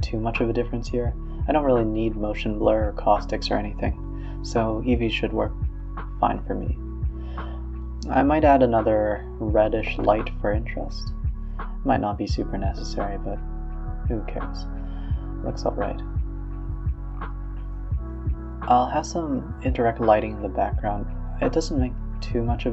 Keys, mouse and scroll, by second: 0.4 shift+a, 0.8 g, 1.6 g, 4.6-6.0 drag, 6.5 click, 7.0 g, 8.2 KP_0, 8.5 a, 8.6 a, 8.8 space, 9.8 z, 10.5 click, 10.9 g, 11.5 g, 12.1 a, 12.1 a, 14.6-15.3 scroll down 2, 15.3 click, 15.8 click, 16.2-16.6 scroll up 3, 16.6-18.3 scroll down 1, 19.6 click, 19.8 r, 20.6 shift+click, 21.1 shift+click, 21.4 shift+click, 21.8 r.